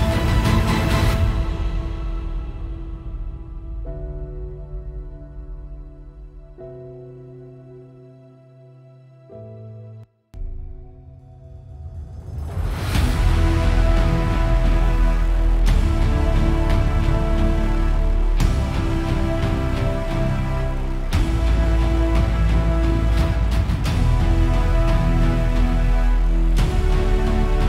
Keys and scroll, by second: 10.3 space, 10.5 space.